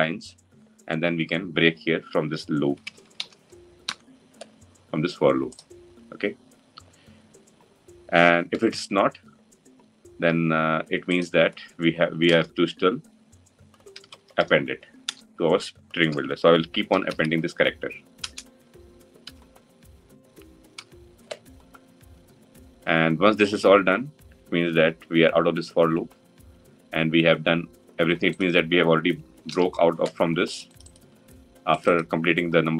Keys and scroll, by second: 14.9 Return, 29.2 ctrl+alt+l.